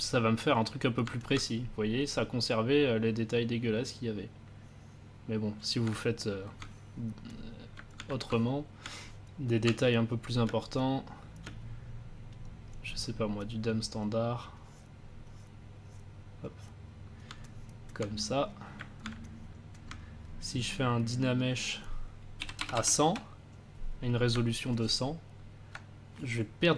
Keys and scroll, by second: 10.4 space, 22.1-23.0 typing.